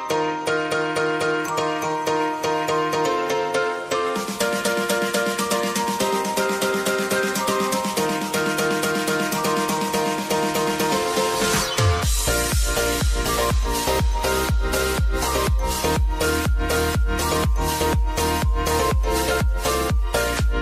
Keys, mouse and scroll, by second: 0.0-0.3 typing, 2.5 click, 4.8-6.8 typing, 6.3 click, 8.7 space, 9.3 click, 9.8 scroll up 1, 10.9 click, 13.7-15.0 scroll up 1, 15.0-20.6 drag.